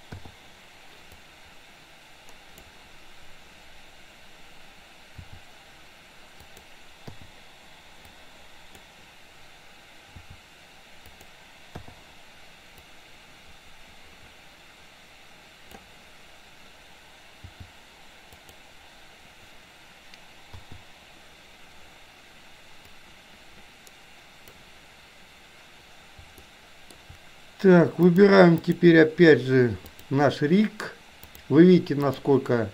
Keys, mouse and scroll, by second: 0.3 i, 1.3-2.8 drag, 5.3 r, 7.1 i, 8.3 click, 10.3 r, 11.9 i, 13.0-15.9 drag, 17.5 g, 20.6 i, 23.0-24.6 drag, 26.5-27.0 shift+middle drag, 28.0-28.9 drag, 29.9 click, 31.4 click.